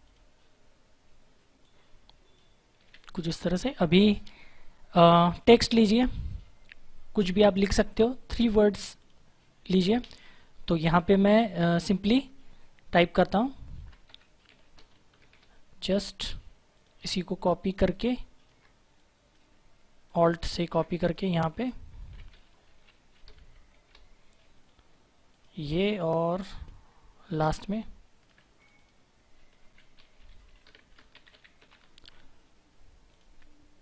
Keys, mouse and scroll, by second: 5.5 click, 8.9 click, 14.0-15.1 typing, 16.7 click, 17.9 shift+click, 18.5 shift+click, 20.0 alt+click, 21.0 click, 21.9 ctrl+a, 23.3 shift+b, 23.6 shift+e, 25.2 click, 27.3 alt+click, 28.5 click, 29.5 ctrl+a, 30.7-31.6 typing, 33.0 click.